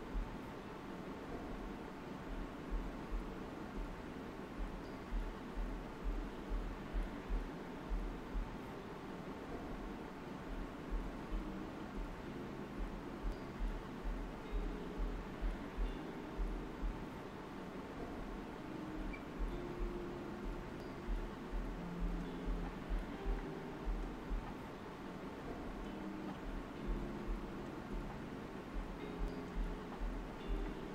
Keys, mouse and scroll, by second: 0.1 scroll down 1, 0.4 middle click, 1.2-2.2 scroll up 1, 2.2 middle click, 3.2 click, 3.7 right click, 5.2 alt+right click, 6.1 alt+right click, 7.8-9.3 typing, 9.1 click, 10.4 click, 11.1 shift+click, 11.9 alt+right click, 12.2 space, 12.4 click, 13.0 shift+d, 14.8 click, 16.0 shift+click, 16.3 typing, 18.1-19.7 shift+drag, 19.7 alt+right click, 20.8 click, 21.8 shift+click, 22.7 alt+right click, 24.6 click, 25.6 shift+click, 27.9-29.2 shift+drag, 29.2 alt+shift+right click.